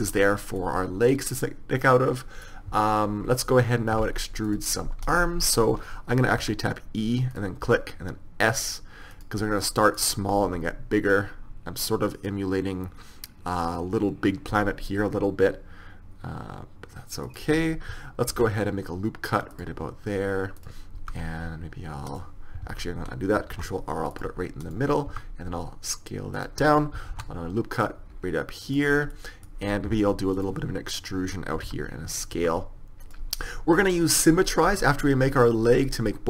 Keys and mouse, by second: 5.1-6.3 middle drag, 6.3 right click, 6.4 e, 7.7 s, 10.5 e, 11.5 middle click, 14.6 s, 18.3 ctrl+r, 21.0 s, 22.7 ctrl+z, 23.6 ctrl+r, 25.1 s, 27.2 ctrl+r, 29.2-30.4 middle drag, 30.4 click, 30.9-32.2 middle drag, 31.7 e, 32.4 s.